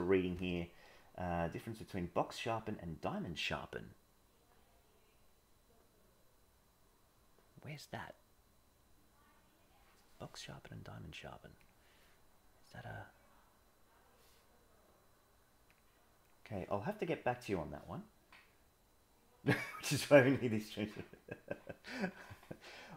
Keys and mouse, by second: 11.2-11.7 drag, 15.7-16.3 drag.